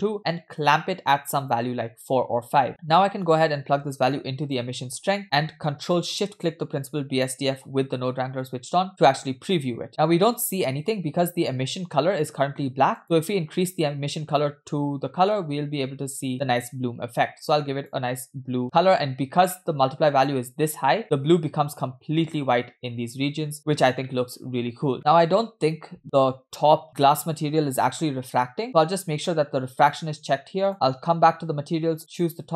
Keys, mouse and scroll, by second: 0.5-2.7 drag, 2.7 middle click, 3.3-4.7 drag, 5.9 click, 6.6 ctrl+shift+click, 9.9 middle click, 9.9-10.3 scroll up 4, 10.8 shift+middle click, 11.0-11.5 scroll up 1, 13.0 click, 19.5 middle click, 20.0 scroll up 2, 20.9-22.2 scroll up 4, 21.0 shift+middle click, 23.5-24.1 scroll down 4, 24.2 shift+middle click, 24.7-25.1 scroll down 2, 26.8 middle click, 27.7 scroll up 1, 28.6 click, 28.6 scroll down 2, 30.7 click, 31.5-31.9 scroll up 2, 32.2 click.